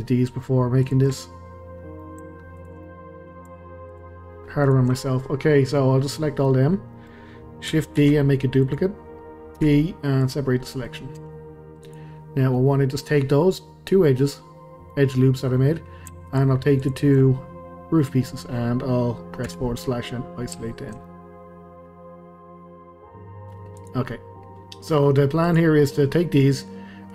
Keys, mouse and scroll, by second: 0.8 shift+click, 1.2-2.6 middle drag, 2.6 shift+click, 2.8-3.9 middle drag, 3.9 shift+click, 4.6 shift+click, 5.0-6.7 middle drag, 6.7 scroll down 2, 6.9-8.0 middle drag, 8.0 shift+d, 9.6 p, 10.6-11.2 middle drag, 11.2 Tab, 11.8 click, 12.5-16.3 middle drag, 16.3 shift+click, 16.8 shift+click, 17.2-19.4 middle drag, 19.4 KP_Divide, 20.6-23.8 shift+middle drag, 23.8 click, 24.1-25.4 middle drag, 25.4 click, 25.8-27.1 middle drag.